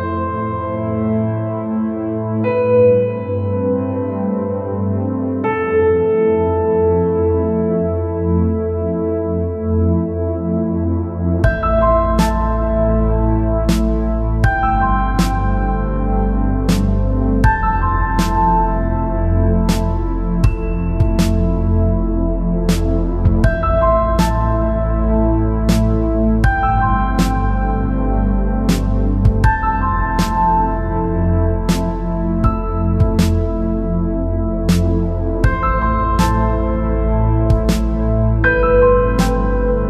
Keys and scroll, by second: 7.5-8.3 space, 24.1-24.8 space, 35.5-36.1 space.